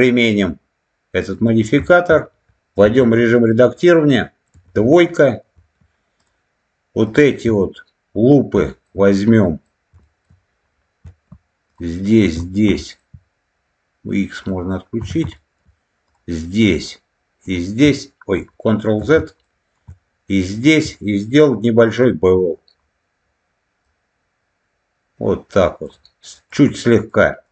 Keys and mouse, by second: 0.0-1.4 drag, 1.8 shift+middle click, 2.7 Tab, 3.1 click, 4.4 2, 7.0 alt+shift+click, 8.5 shift+middle click, 9.2 middle click, 9.9 shift+middle click, 12.1 alt+shift+click, 12.7 shift+middle click, 14.3 click, 15.2 shift+middle click, 16.0 alt+shift+click, 16.6 alt+shift+click, 17.4 alt+shift+click, 18.9 ctrl+z, 19.3 middle click, 23.8-25.8 drag, 26.2 click, 27.0 middle click.